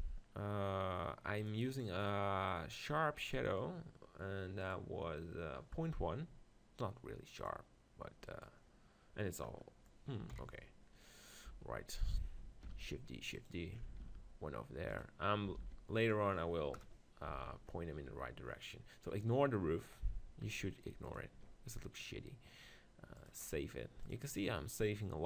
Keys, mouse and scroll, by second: 1.4-4.0 drag, 3.3 middle click, 4.0-5.6 right drag, 5.6 click, 7.4-9.3 drag, 8.3-10.0 right drag, 10.0-11.9 middle drag, 10.3 KP_7, 11.5 g, 12.0-14.4 drag, 12.6 shift+d, 14.0 shift+d, 15.6 shift+d, 16.7 KP_0, 17.4 z, 17.7 click, 17.9-20.5 middle drag, 21.1-25.1 drag.